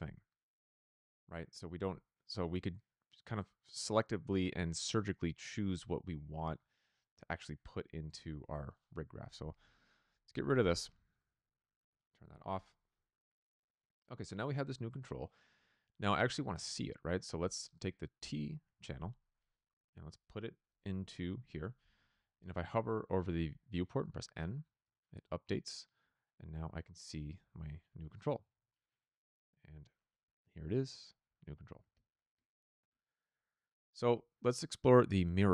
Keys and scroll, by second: 10.3 BackSpace, 28.4 shift+v.